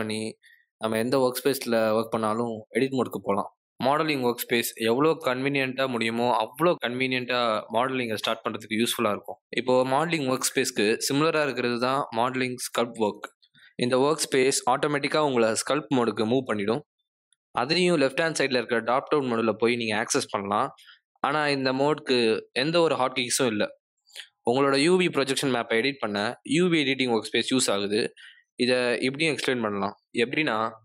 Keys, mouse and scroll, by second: 14.0 click, 17.7 BackSpace.